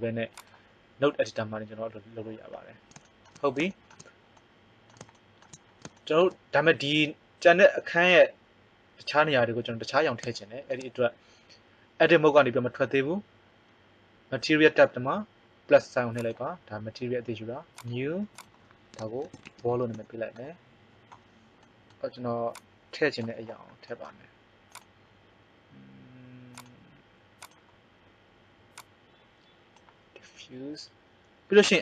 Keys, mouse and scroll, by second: 16.1-21.5 drag, 19.6 l, 22.5 click.